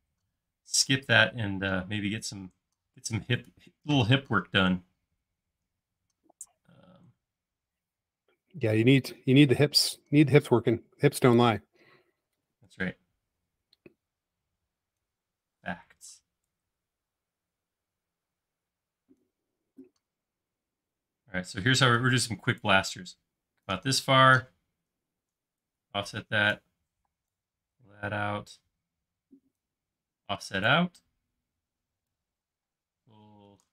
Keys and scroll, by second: 11.8 c, 15.6 p, 25.4 f, 27.0 p, 30.3 f, 32.6 p, 33.5 Escape.